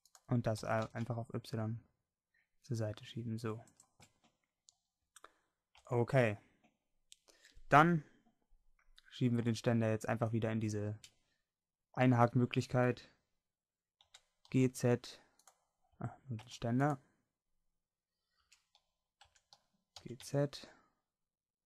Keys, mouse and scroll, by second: 0.6 s, 4.2-5.8 middle drag, 5.8 Tab, 9.5-10.8 middle drag, 14.0 g, 15.5 click, 16.0 Tab, 16.5 Tab, 18.5 Tab, 19.4 Tab, 20.0 g.